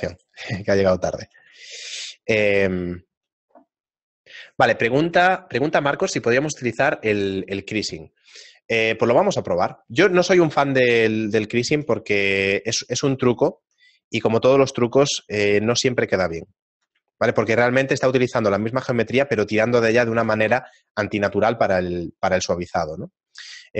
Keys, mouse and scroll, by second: 0.3 shift+right click, 0.7 shift+middle click, 1.7 shift+middle click, 3.0 shift+middle click, 8.5 shift+middle click, 9.6 shift+right click, 10.5 shift+middle click, 11.7 z, 12.5 shift+middle click, 12.5 z, 14.1 middle click, 15.1 n, 15.8 middle click, 16.2 shift+middle click, 16.5 ctrl+middle click, 18.5 shift+middle click.